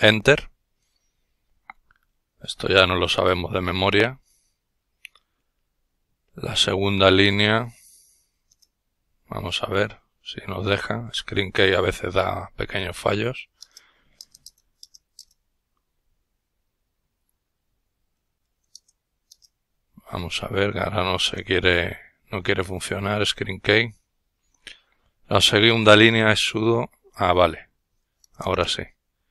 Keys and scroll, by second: 25.0-29.3 typing.